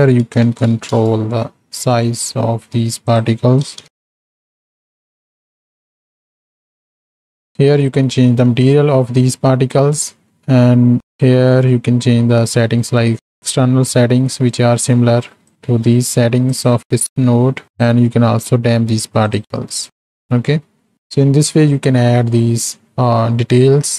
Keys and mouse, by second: 3.2-4.9 drag, 5.6 z, 6.5 alt+a, 7.4 click, 10.2 middle click, 14.3 middle click, 15.5 click, 16.5 click, 17.0 middle click, 17.7 click, 19.2 click, 19.8 click, 23.7 middle click.